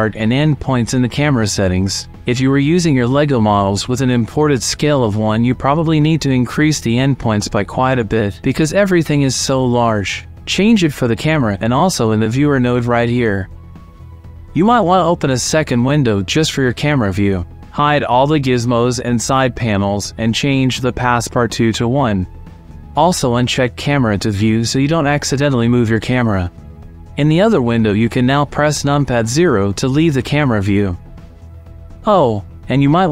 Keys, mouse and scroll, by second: 7.6 KP_0, 10.8-12.3 drag, 14.6 click, 15.6-16.8 drag, 18.1 n, 18.7 t, 19.3-19.7 drag, 20.3-22.8 drag, 25.2 n, 26.0 click, 26.5 click, 26.8 n, 27.2 click, 27.4 KP_0, 27.6 shift+click, 28.0 click, 28.4 shift+click, 29.5 KP_0, 29.7 middle click, 30.2 KP_5, 30.8 middle click, 31.7 n, 32.6 click.